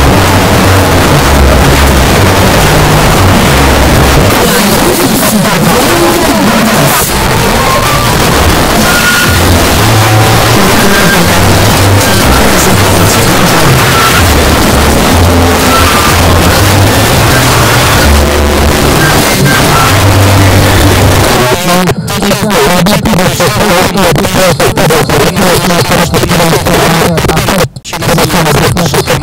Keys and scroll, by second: 21.3 Page_Down.